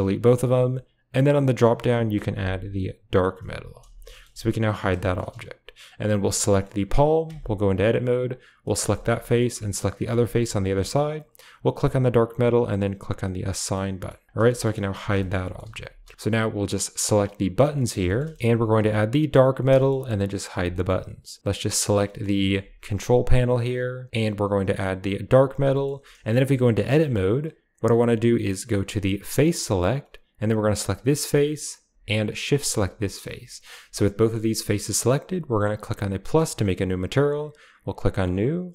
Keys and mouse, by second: 1.3-3.3 drag, 4.0 shift+drag, 4.7 typing, 5.0 shift+middle drag, 5.9-6.3 drag, 6.3-6.6 middle drag, 7.8 Tab, 8.1 click, 8.6 middle click, 8.9 shift+middle click, 9.2 middle click, 9.8 shift+click, 10.0 middle click, 11.6-12.8 drag, 13.1 click, 13.7 middle click, 14.2 Tab, 14.5 shift+middle click, 15.0 h, 15.1 shift+middle drag, 15.3 middle click, 16.1 shift+click, 18.5 click, 19.7 shift+middle click, 20.4 h, 20.7 middle click, 21.4 click, 22.0 middle click, 22.4 shift+middle click, 24.3-25.3 drag, 25.7 shift+middle click, 26.3 Tab, 26.6 middle click, 27.0 shift+click, 30.8 click, 32.5 shift+click, 33.3 KP_Decimal, 34.2 middle click, 35.5 typing, 37.9 click.